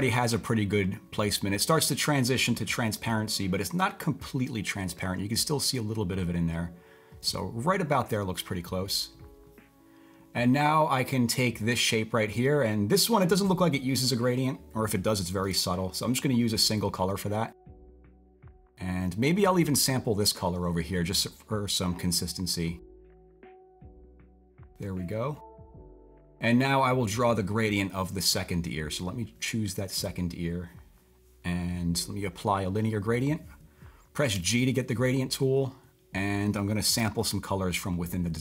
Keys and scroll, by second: 15.4 d, 34.1-34.8 typing, 37.0 typing.